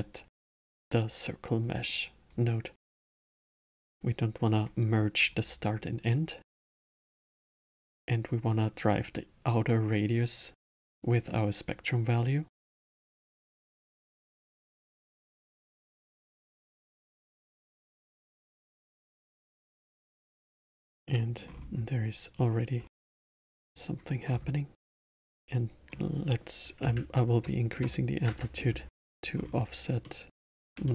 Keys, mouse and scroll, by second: 1.6 click, 3.2 click, 5.3 click, 6.0-8.3 middle drag, 8.3 click, 13.0 click, 16.4-19.3 middle drag, 19.3-20.6 drag, 20.6-21.4 alt+middle drag, 21.4-22.1 scroll up 6, 22.8 scroll down 5, 23.3 middle click, 24.3 scroll up 7, 25.6-28.6 drag, 29.3-30.0 scroll down 2, 30.0-30.9 middle drag.